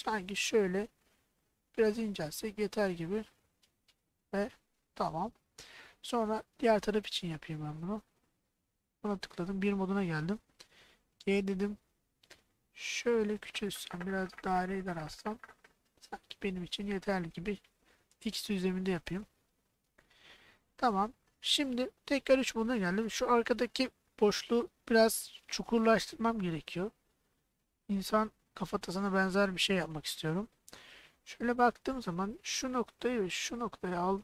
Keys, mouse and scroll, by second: 3.9 click, 4.8-5.9 middle drag, 6.6 middle click, 7.3 middle click, 8.2 click, 8.8 middle click, 9.5 KP_1, 11.0 g, 17.8 x, 19.7 click, 20.7 middle click, 21.9 KP_3, 30.6-31.7 middle drag, 33.6 shift+click.